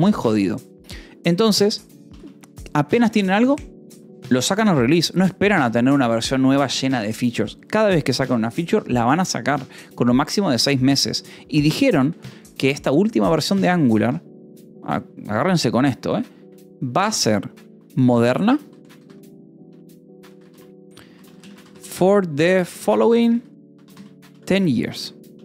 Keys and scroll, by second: 2.7 shift+v, 3.2 Escape, 11.4 o, 11.9 :, 12.1 space, 18.4-21.3 typing, 22.4-25.4 typing.